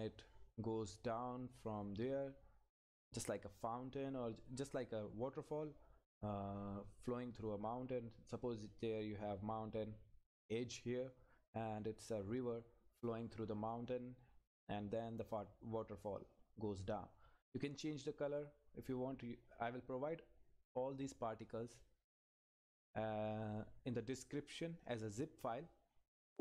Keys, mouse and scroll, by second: 18.7 scroll down 1, 21.5 scroll up 1, 21.7 click, 22.4-22.8 scroll down 1, 24.1 click, 24.6 scroll down 1, 26.1 click.